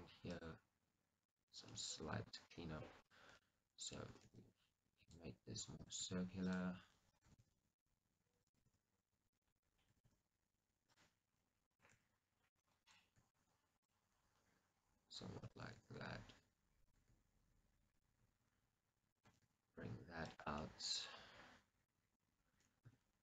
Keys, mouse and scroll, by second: 0.4 click, 1.3 click, 1.8-3.1 middle drag, 3.1 click, 3.5-5.2 middle drag, 4.2 g, 5.2 click, 5.9 click, 6.0 g, 6.7 click, 7.4 g, 8.5-9.5 drag, 8.7 g, 9.5 right click, 10.0 g, 11.1 click, 11.7-12.8 drag, 11.9 g, 12.8 right click, 13.2 g, 13.9 click, 15.7 g, 18.1 click, 19.2 click, 19.4 g, 20.5 click, 20.7 middle click, 22.9 Tab.